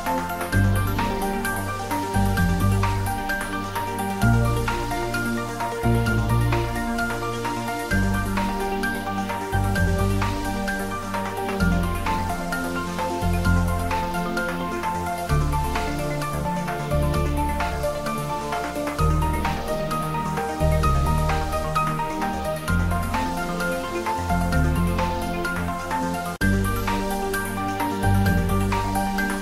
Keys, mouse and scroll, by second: 1.4 click, 1.5 s, 3.1 click, 3.3 shift+middle click, 4.4 3, 4.6 click, 5.7 shift+click, 6.3 e, 8.0 click, 8.5 middle click, 8.5 middle click, 9.4 Tab, 10.6 ctrl+3, 10.9 Tab, 11.3 ctrl+r, 11.6 click, 13.0 ctrl+r, 13.3 click, 13.9 Tab, 14.6 ctrl+r, 15.1 click, 16.7 ctrl+r, 17.0 click, 18.2 ctrl+r, 18.9 click, 20.2 ctrl+r, 20.4 click, 20.9 Tab, 21.6 right click, 22.3 click, 22.9 ctrl+d, 23.1 click, 23.5 middle click, 24.2 click, 24.8-27.5 typing, 26.3 click, 27.5 click, 28.0 ctrl+s, 28.1-29.4 ctrl+middle drag.